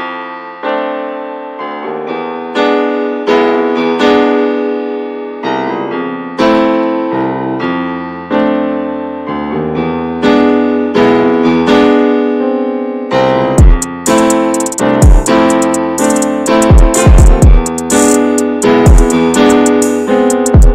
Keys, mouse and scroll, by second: 0.5 scroll down 4, 0.8-2.1 shift+middle drag, 2.1 click, 2.5-3.9 middle drag, 3.9 scroll up 1, 4.3 middle click, 4.9-5.7 scroll up 3, 5.7 ctrl+r, 6.1-6.5 scroll down 1, 6.5 middle click, 7.4-7.8 scroll up 1, 7.8 ctrl+r, 8.4-8.8 scroll down 2, 8.8-10.5 middle drag, 10.5 scroll down 1, 10.9-12.0 shift+middle drag, 12.0-12.9 scroll up 4, 12.2 shift+middle click, 12.9-14.0 middle drag, 14.0 ctrl+r, 14.8 ctrl+r, 16.6-17.0 scroll down 7, 17.0 middle click, 17.6 Tab, 17.6 scroll down 3, 17.9-18.9 shift+middle drag, 18.9 ctrl+a, 19.0-19.6 shift+middle drag, 19.6 ctrl+s, 20.0-20.6 middle drag, 20.6 ctrl+s.